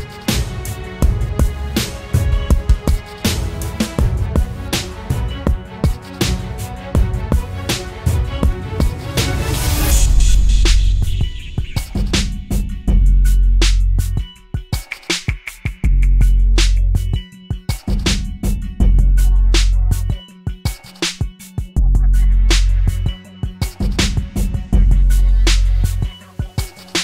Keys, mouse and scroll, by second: 7.5 Return, 16.9 shift+click, 17.7 shift+click.